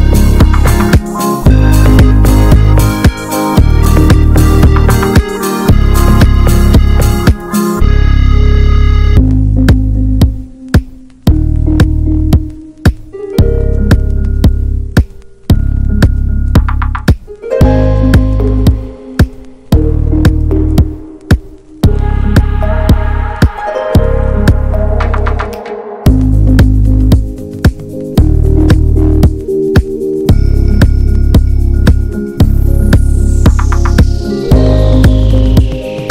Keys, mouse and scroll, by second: 1.6-2.0 middle drag, 2.0 scroll up 1, 2.2-3.6 drag, 3.6 scroll down 1, 3.8-5.2 middle drag, 5.2-7.6 drag, 8.0-9.4 middle drag, 9.4 click, 9.9 alt+middle click, 13.7-25.4 drag, 25.4 scroll up 1, 33.9 f.